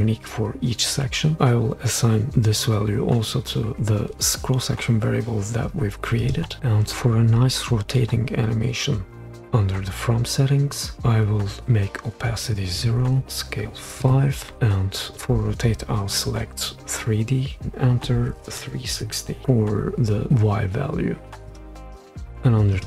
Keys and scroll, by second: 14.0 5, 18.4-18.9 typing.